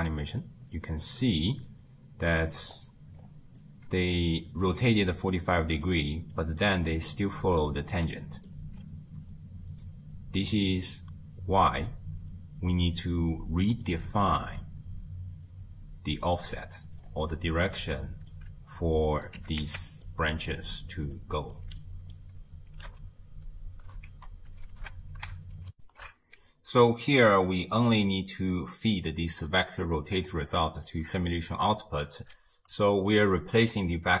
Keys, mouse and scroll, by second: 1.0 space, 1.7-2.4 middle drag, 2.4-3.2 scroll up 4, 3.2-3.6 scroll up 3, 3.6-4.7 middle drag, 4.7-8.7 typing, 5.3 click, 6.4 right click, 7.2 click, 7.8 click, 9.3-9.6 scroll down 2, 12.7-15.9 middle drag, 17.1-17.7 scroll down 5, 17.7-18.8 middle drag, 18.8 drag, 19.4 g, 20.3-21.2 middle drag, 21.2 click, 21.8-24.7 middle drag, 24.7 shift+space, 25.7 n, 27.2-29.5 middle drag, 29.5 click, 32.8-34.2 middle drag.